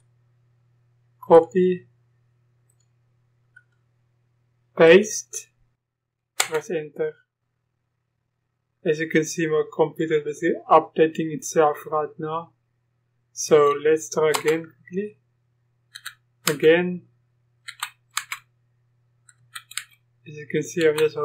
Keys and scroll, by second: 7.5 Return, 13.6 Up, 14.3 Return, 15.9 Up, 16.5 Return, 17.7 Up, 18.1 Return, 19.4 Up, 19.7 Return, 20.8 Up.